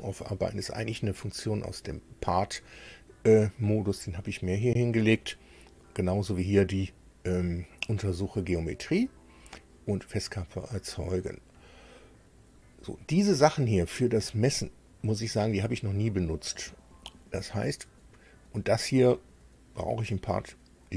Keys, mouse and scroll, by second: 18.7-20.9 drag.